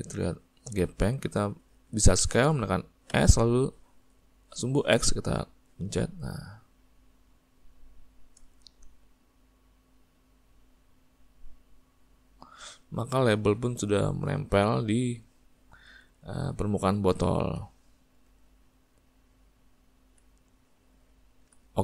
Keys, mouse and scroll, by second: 3.2 5, 9.8 click, 13.0-17.7 middle drag, 19.7-21.8 ctrl+middle drag.